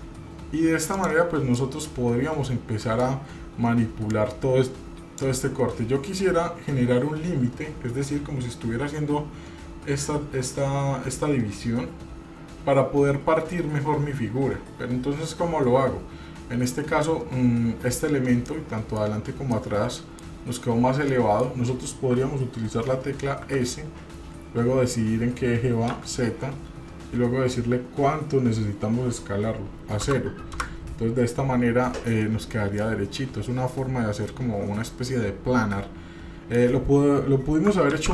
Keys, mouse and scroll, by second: 1.6-3.1 middle drag, 4.1-5.2 drag, 7.8-9.1 scroll up 2, 9.1-10.1 scroll up 1, 18.5 middle click, 19.5 middle click, 21.1 middle click, 23.6 s, 32.9-36.5 middle drag, 37.9 ctrl+z.